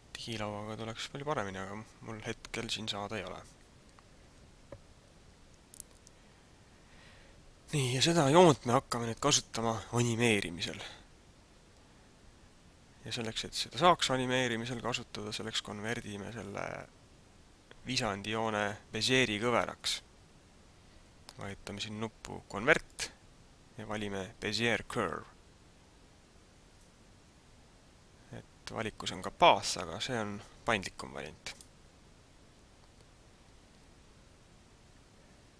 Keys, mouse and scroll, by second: 23.1 click.